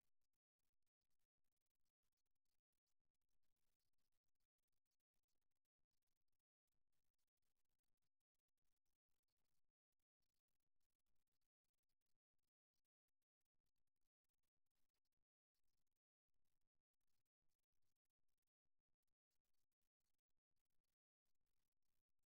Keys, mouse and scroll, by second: 0.2 click, 1.2 click, 2.2 click, 3.8-6.2 drag, 6.2-8.6 middle drag, 10.8-14.4 middle drag, 15.0 alt+f, 16.6-19.8 middle drag, 20.9-22.3 middle drag.